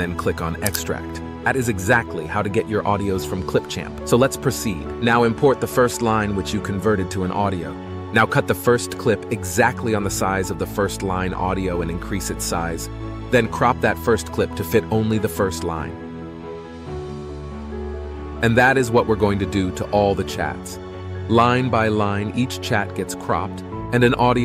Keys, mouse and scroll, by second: 8.0 space, 13.3 space.